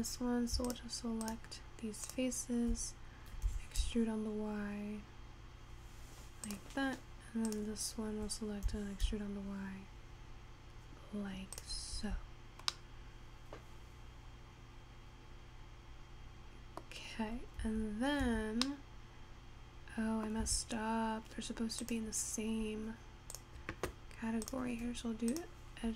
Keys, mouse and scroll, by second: 0.7 shift+click, 1.3 shift+click, 2.2 shift+click, 3.5 e, 7.5 click, 8.8 e, 12.3 Tab, 13.4-15.9 middle drag, 17.1-18.1 scroll down 5, 18.1 Tab, 18.5 Tab, 18.9-20.9 middle drag, 20.9 Tab, 21.4-23.2 scroll up 1, 23.2 click, 24.0 click, 24.6 click.